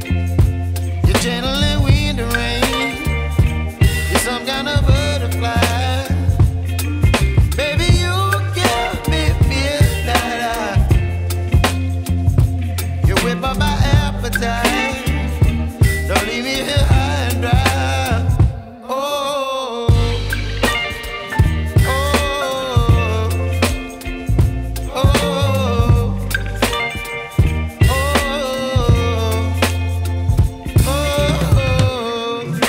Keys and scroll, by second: 7.0 Escape, 10.2 e, 10.9 shift+F2, 11.4 Escape, 15.0 F3, 19.9 Escape, 23.2 F3, 25.8 ctrl+r, 26.8 ctrl+r, 27.2 Escape, 31.4 Escape, 31.9 F4.